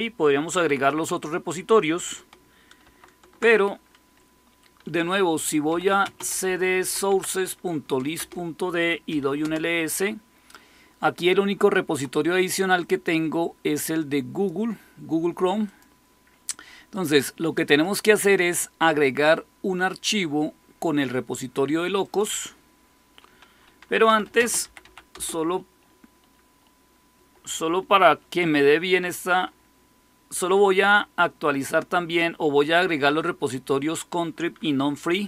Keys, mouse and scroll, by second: 2.8 ctrl+x, 5.4-7.2 typing, 8.1 Return, 8.8-9.8 typing, 12.7-24.0 drag, 23.7-25.2 typing, 35.0-35.2 typing.